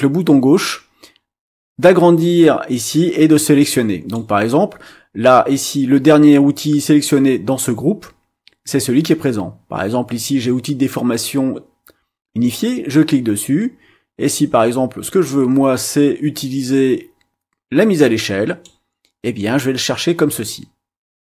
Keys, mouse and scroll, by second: 12.6-18.8 drag.